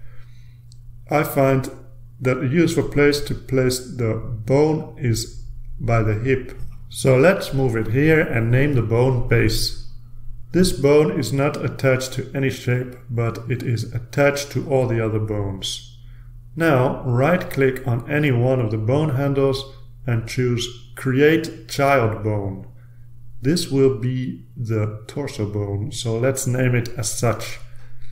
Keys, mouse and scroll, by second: 0.7 ctrl+alt+space, 0.7 ctrl+alt+r, 3.6-5.7 drag, 6.4-9.4 drag, 10.0 click, 11.9-13.9 typing, 13.9 Return, 21.0 click, 24.2-26.8 drag.